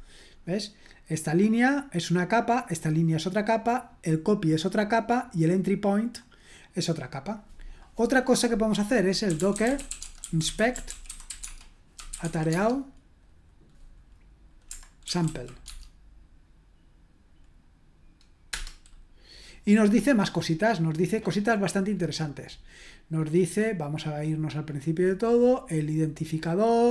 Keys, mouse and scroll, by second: 1.1-4.1 drag, 4.9-7.8 drag, 9.0-12.7 typing, 14.8-15.7 typing, 18.5 Return, 21.8-24.6 scroll up 2, 24.6-25.4 scroll up 1, 26.5-26.9 scroll down 2.